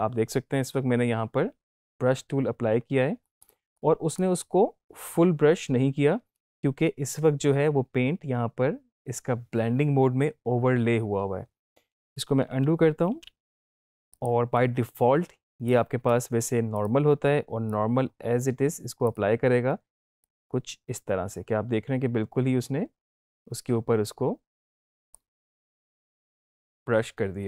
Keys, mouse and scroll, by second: 3.2 right click, 4.0 click, 12.4 ctrl+z, 14.0-16.2 drag.